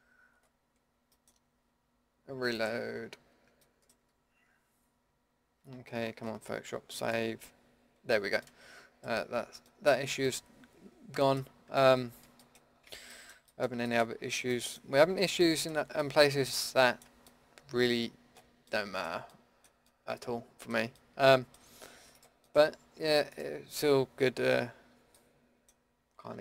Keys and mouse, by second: 1.1 click, 2.7-3.8 middle drag, 3.8-7.7 drag, 4.5 Tab, 8.4 middle click, 9.3 Tab, 10.0 Tab, 15.5-17.5 middle drag, 18.1 middle click, 19.0 middle click, 21.3 middle click, 22.1 middle click, 22.6 Tab, 25.5 click, 26.2 Tab.